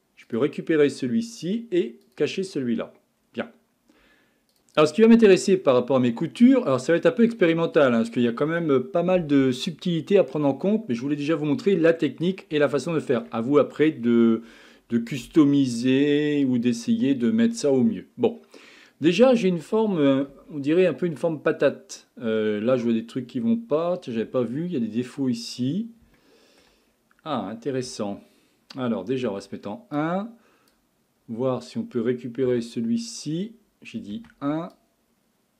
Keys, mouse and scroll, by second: 0.3 click, 2.0 click, 2.7-3.2 scroll up 4, 3.2-3.7 scroll down 3, 4.5 click, 4.9-10.2 middle drag, 11.7-15.9 middle drag, 17.6-20.3 middle drag, 20.3 KP_1, 24.4-25.5 shift+middle drag, 25.5-26.2 scroll up 6, 26.2 shift+middle click, 26.8-27.9 scroll up 5, 27.9 Tab, 29.3 1, 30.0 click, 32.5 Tab, 34.2 1, 34.7 click.